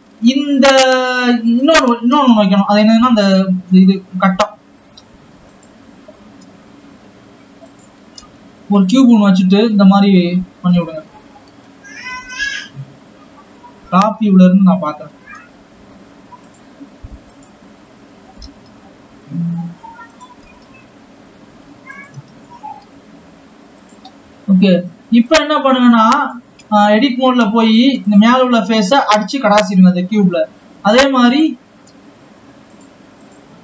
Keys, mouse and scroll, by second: 0.8 ctrl+s, 1.0 Tab, 2.3 scroll down 8, 2.5 shift+a, 9.1 s, 14.8 KP_7, 15.0-15.8 scroll up 1, 15.8 g, 17.8 click, 19.0 g, 23.3 s, 26.0 click, 27.6 Tab, 28.3 click, 29.1 x, 32.1 click, 32.3 x.